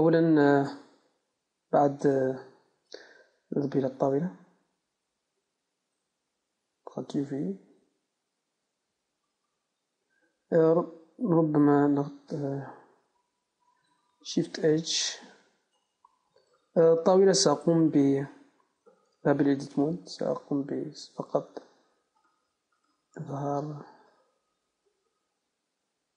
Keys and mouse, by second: 2.3 n, 4.5-9.3 right drag, 9.3 Tab, 11.3 z, 13.5 Tab, 14.7 shift+h, 19.1 Tab, 19.9-23.7 right drag, 23.5-24.7 middle drag.